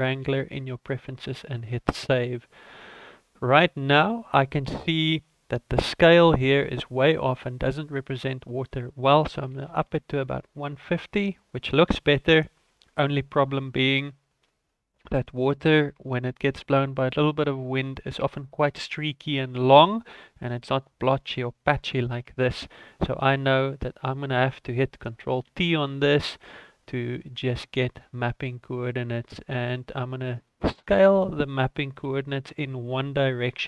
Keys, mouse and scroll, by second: 2.7 middle click, 7.4-7.8 scroll up 2, 7.8 middle click, 8.6 click, 22.2-22.5 scroll up 3, 22.5-23.2 scroll down 2, 23.2 click, 25.5 ctrl+t, 26.1 middle click, 30.4 click, 31.1 click.